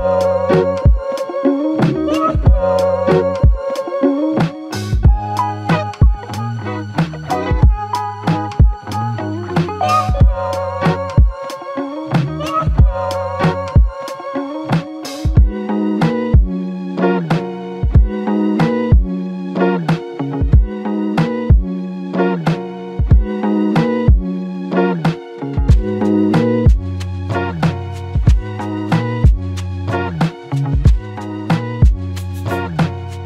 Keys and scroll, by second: 28.2 ctrl+scroll up 1, 30.0 scroll down 2.